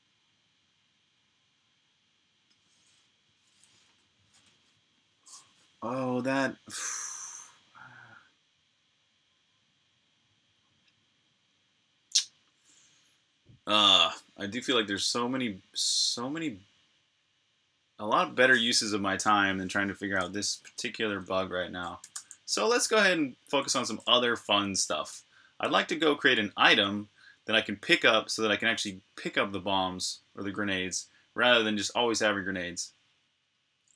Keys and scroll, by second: 20.2 Escape, 20.5 typing, 21.8 m, 33.6-33.9 typing.